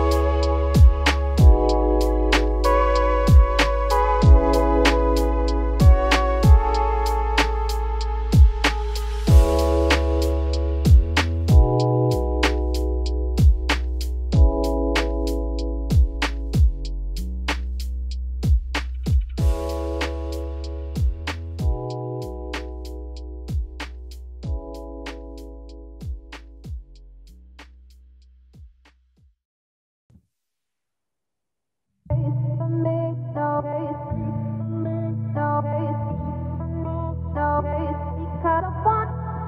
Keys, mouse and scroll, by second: 6.4-6.7 scroll up 2, 6.7-7.1 scroll down 5, 7.1 shift+middle click, 7.3 scroll up 4, 7.5 z, 8.0 click, 8.6 z, 9.0-9.7 scroll down 2, 9.7 g, 10.6 Tab, 10.8-12.2 scroll down 4, 12.2 click, 13.8-14.4 scroll up 2, 14.4-15.2 scroll down 3, 15.2-17.2 shift+middle drag, 17.2-17.8 scroll down 2, 17.8-18.3 scroll up 2, 18.3-19.3 shift+middle drag, 19.3 click, 19.8 scroll up 1, 19.9-20.5 middle drag, 20.5-21.0 scroll up 5, 21.0-24.8 middle drag, 24.8-25.2 shift+right drag, 25.2 shift+a, 28.9 middle click, 29.2 1, 29.6 `, 30.3 shift+middle click, 30.6-31.1 scroll up 5, 31.1 shift+middle click, 31.4-32.0 scroll up 3, 32.0 scroll up 1, 32.0 shift+middle click, 32.9 e, 35.3 scroll down 2, 35.4-37.0 middle drag, 37.0 `, 38.0 scroll up 2, 38.5 e.